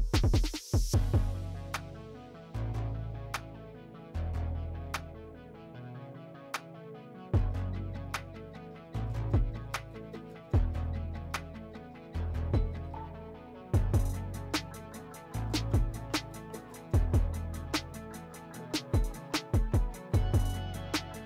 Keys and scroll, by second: 1.4 alt+q, 4.8-6.7 typing, 7.8 s, 19.4 s, 20.2 3, 20.5 3.